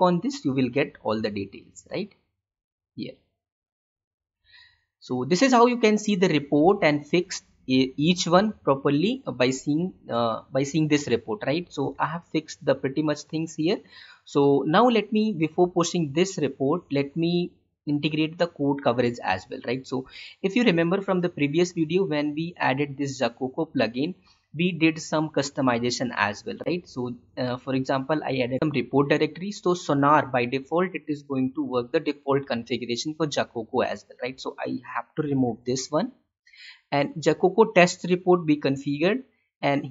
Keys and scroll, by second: 12.0 alt+Tab, 35.1 ctrl+/.